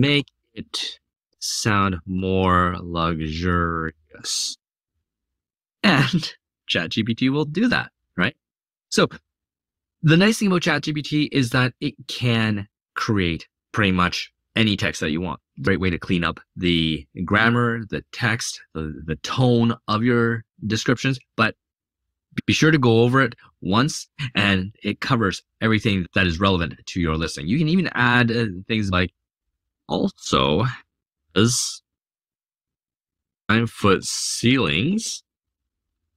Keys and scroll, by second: 0.0-4.4 typing, 29.0-35.3 typing.